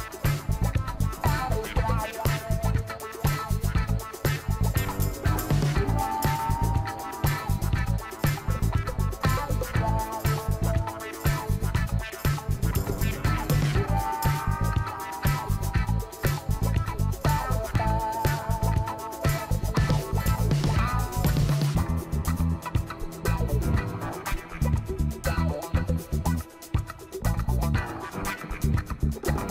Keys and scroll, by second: 5.4 ctrl+t, 22.3 ctrl+l.